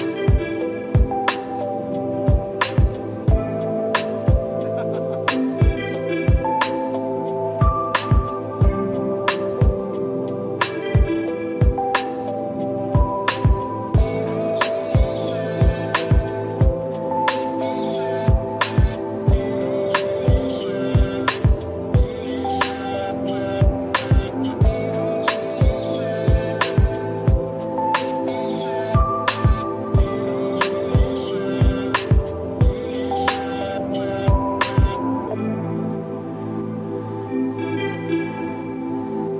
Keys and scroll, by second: 14.8 space, 22.2 space, 22.5 ctrl+=, 22.6 ctrl+-, 23.0 ctrl+=, 26.8 ctrl+=.